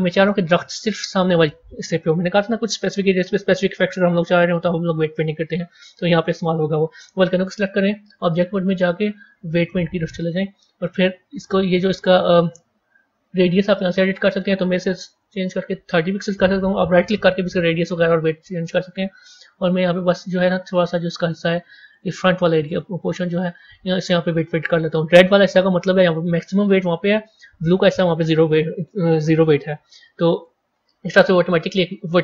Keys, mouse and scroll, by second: 0.2-3.3 middle drag, 7.9-11.0 drag, 11.2-11.7 scroll up 1, 11.7-14.0 scroll down 1, 14.0-16.8 drag, 16.8-19.8 right drag, 19.8-27.2 drag, 31.3-32.2 drag.